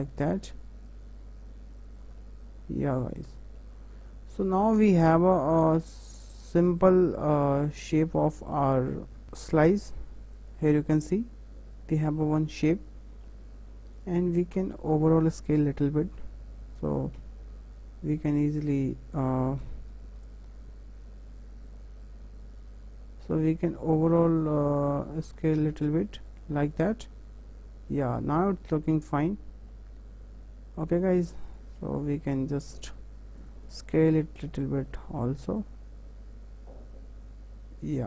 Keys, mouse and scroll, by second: 2.2-6.8 middle drag, 6.8 click, 7.5 alt+click, 8.2-9.2 middle drag, 9.2 s, 10.7-12.4 middle drag, 12.4 scroll down 2, 12.7-14.5 middle drag, 14.5 Tab, 17.1 s, 17.7 y, 18.6 click, 19.6 s, 26.6 click, 26.9-28.2 middle drag, 28.2 scroll up 1, 28.5-29.3 middle drag, 29.3 Tab, 29.7-31.4 middle drag, 31.4 alt+click, 33.4-34.5 drag, 34.5-35.6 middle drag, 35.6 click.